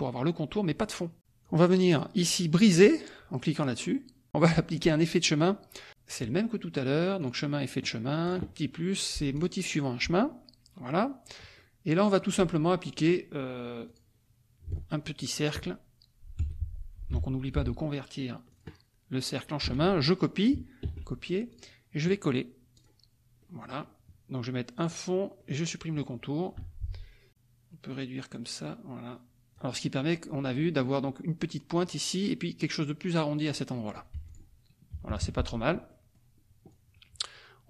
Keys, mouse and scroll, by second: 1.4-2.5 drag, 6.1 click, 7.3 click, 8.2 click, 9.4 click, 11.5 click, 13.8 click, 14.8 ctrl+shift+click, 16.4 F1, 17.1 F2, 18.5 click, 19.6 F1, 20.8 ctrl+c, 21.5 click, 22.7 click, 23.4 click, 24.7 click, 25.3 click, 26.6 F2, 27.3-29.7 drag, 34.1 F1, 34.2 click, 34.9 KP_Subtract, 35.8-37.6 drag.